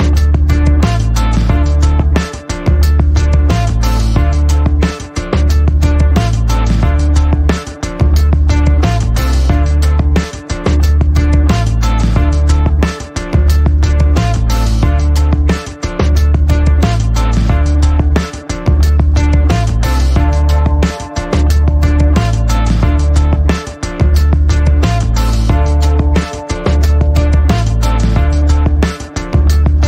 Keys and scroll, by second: 11.3-12.6 typing, 15.2 Return, 27.0 t, 29.2 n.